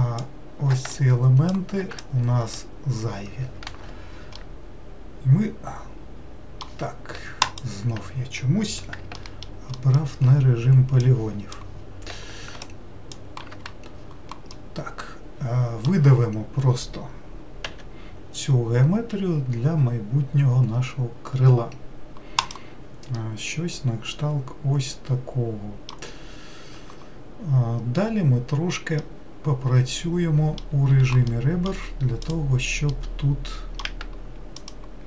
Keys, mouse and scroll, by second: 4.4-7.4 middle drag, 7.4-9.2 drag, 9.2 alt+middle click, 9.7 alt+middle click, 11.0 click, 12.6 ctrl+click, 14.5-17.6 middle drag, 17.6 e, 23.1-26.2 middle drag, 29.0-30.9 middle drag, 30.9 2, 31.3 middle click, 32.2 click, 32.9-34.6 middle drag, 34.6 shift+click.